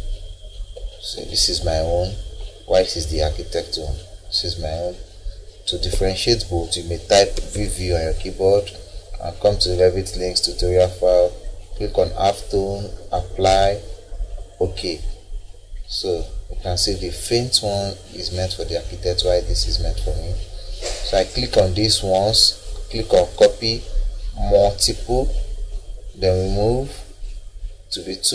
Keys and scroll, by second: 1.1 Escape, 7.3 v.